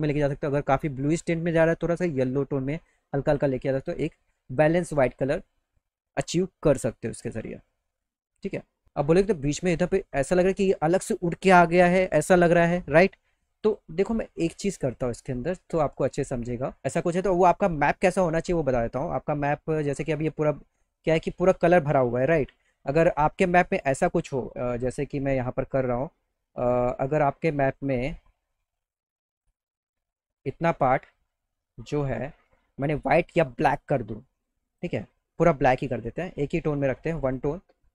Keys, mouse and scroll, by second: 1.3-3.4 drag, 3.8 click, 5.6 middle click, 5.8 middle click, 6.8-7.7 scroll up 4, 13.7 click, 15.7 click, 23.7 click, 26.3 click, 29.0 click, 34.7 click, 35.7 click, 37.3 click.